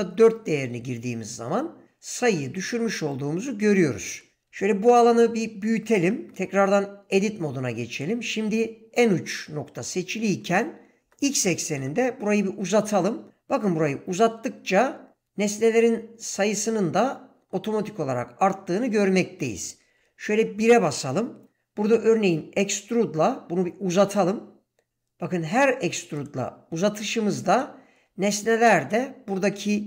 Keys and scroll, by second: 0.0 Return, 4.4 ctrl+space, 6.6 Tab, 11.0 g, 11.8 x, 20.0 1, 23.9 e.